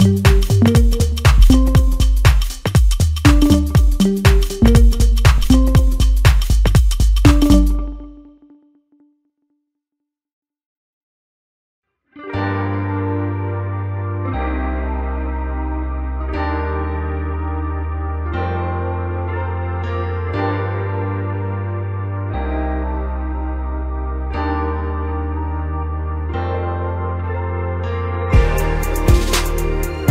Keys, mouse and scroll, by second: 0.1-1.7 scroll up 17, 1.7 s, 2.7-3.2 scroll down 6, 3.6 g, 5.8-7.5 scroll up 3, 7.5 s, 11.3-12.1 scroll up 2, 12.1 click, 12.8 Tab, 13.6 scroll up 1, 14.4 click, 14.6 click, 15.9 ctrl+KP_Add, 17.1 s, 20.7 Tab, 21.4 click, 22.0-22.6 scroll down 2, 22.6 g, 24.8 scroll down 3, 25.1-26.1 middle drag, 26.1-26.9 scroll up 5, 26.9-28.4 middle drag, 28.4 g.